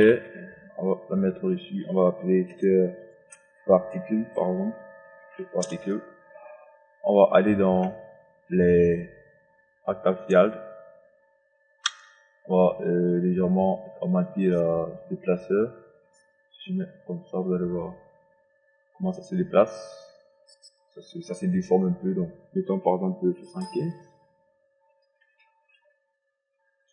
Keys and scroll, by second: 2.2 Return, 5.7 Return, 23.1 KP_7.